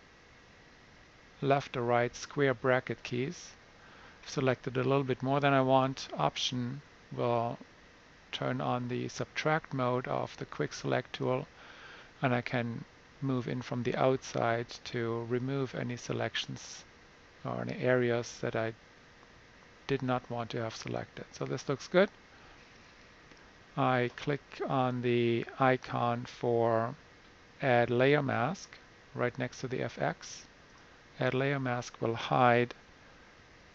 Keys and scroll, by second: 0.0 [, 32.9 super+-, 33.3 super+-.